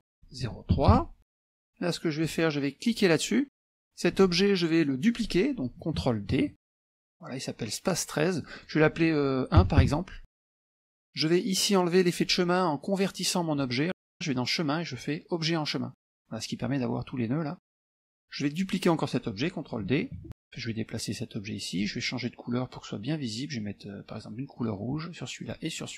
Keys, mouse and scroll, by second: 0.8 KP_3, 0.9 KP_Enter, 1.7 click, 2.3 click, 3.0 click, 6.4 ctrl+d, 8.5 click, 9.7 KP_1, 10.2 KP_Enter, 14.4 click, 16.0 click, 17.5 middle click, 17.5-18.1 scroll down 1, 18.2 click, 20.2 ctrl+d, 20.6-21.9 drag, 24.6 click, 25.5 click.